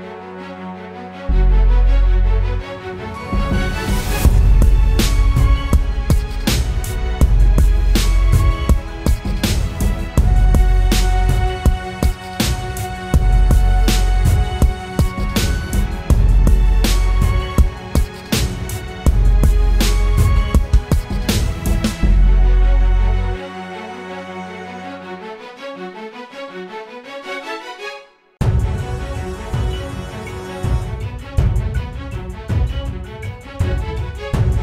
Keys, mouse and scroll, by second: 13.8 alt+click, 18.7-19.8 typing, 20.9-21.6 typing, 23.0-23.7 typing.